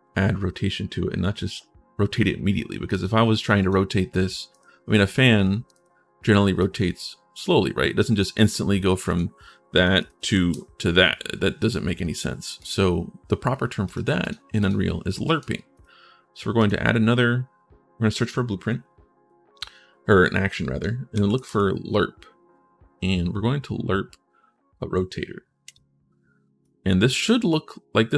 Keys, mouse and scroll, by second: 2.7 click, 3.4 click, 4.8 click, 6.4-8.1 drag, 8.9 click, 9.5 1, 12.3 click, 13.6 click, 14.0 click, 14.3 click, 15.0 click, 15.5 click, 16.4 click, 21.0 e, 25.4 click, 26.4 click.